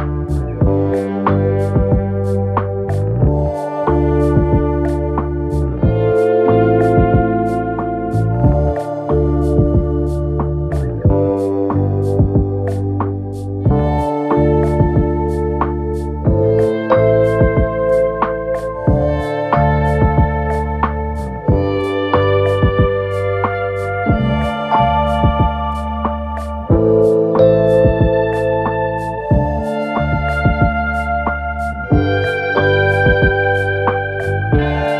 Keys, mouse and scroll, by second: 1.4 Down, 1.8 Down, 2.6 Up, 12.7 space, 15.6 right click.